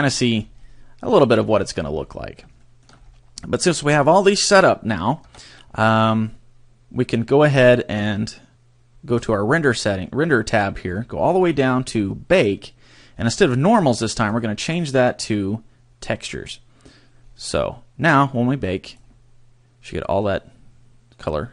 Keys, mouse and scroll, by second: 0.1-0.4 scroll down 6, 0.6 middle click, 1.9 scroll up 4, 2.6 shift+middle click, 3.0-3.6 scroll up 2, 5.2 Tab, 6.1 scroll down 2, 9.2 click, 10.9-12.3 scroll down 12, 12.3 scroll down 1, 14.2 click, 17.2 scroll down 3, 18.6 click.